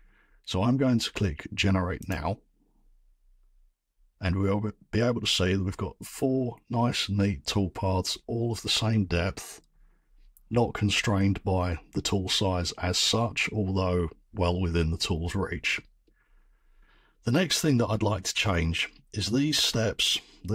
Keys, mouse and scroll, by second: 2.1 click, 5.1-7.2 drag.